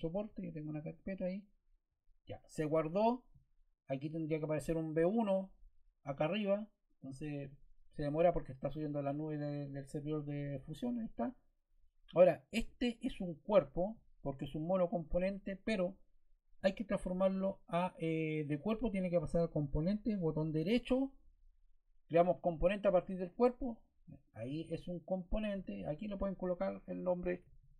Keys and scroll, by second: 27.0 Caps_Lock.